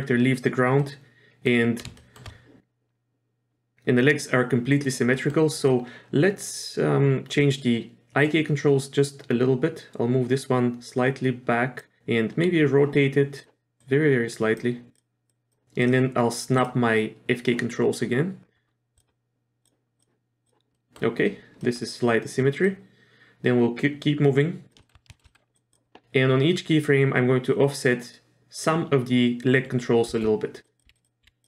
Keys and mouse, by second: 0.8-1.4 middle drag, 2.0 shift+middle click, 5.1 middle click, 5.6 click, 9.1-11.8 drag, 13.4 click, 13.8-14.6 drag, 14.9 drag, 15.3 click, 15.8 drag, 19.0 click, 19.6 click, 20.0 click, 20.4 click, 20.7 middle drag, 21.6 middle click, 22.7-24.7 drag, 24.8 shift+middle click, 25.1 shift+middle drag, 25.3 middle drag, 25.7 click, 30.1 r, 30.8 r, 31.2 r.